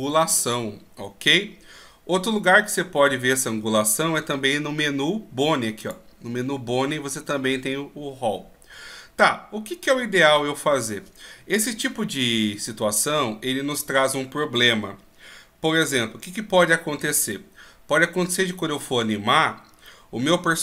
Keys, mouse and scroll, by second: 5.8 click.